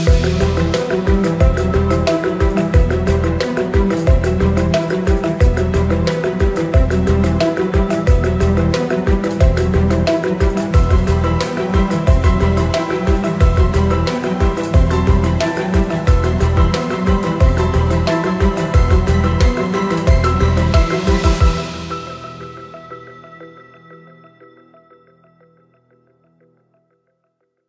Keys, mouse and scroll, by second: 0.2 click, 7.3 click, 12.7-13.9 drag, 17.4 click, 18.1 click, 23.5-24.6 drag.